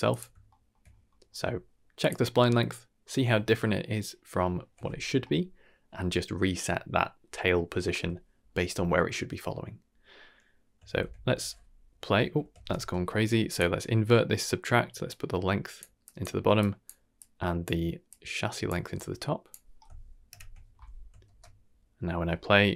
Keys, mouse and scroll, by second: 0.4 shift+middle click, 0.8 scroll up 1, 1.1 middle click, 2.0 click, 10.9 shift+space, 12.6 shift+space, 13.5 click, 15.0-15.7 drag, 16.0 click, 16.6 click, 17.1-17.6 drag, 18.0-18.6 drag, 18.9-19.5 drag, 20.3 shift+Left, 21.2 shift+space.